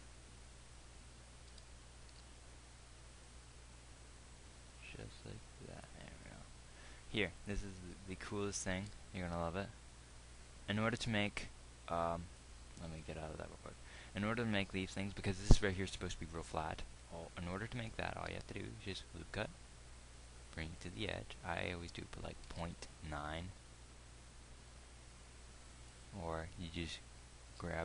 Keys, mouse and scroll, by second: 1.9 g, 9.4 ctrl+r, 18.7 ctrl+r.